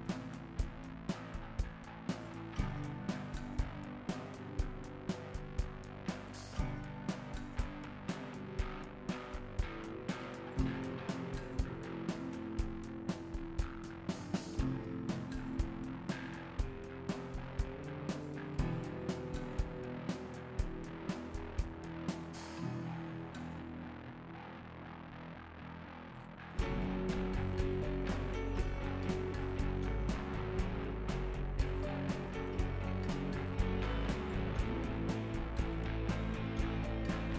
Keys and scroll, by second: 13.0 ctrl+z, 18.3 KP_1, 31.1 ctrl+z.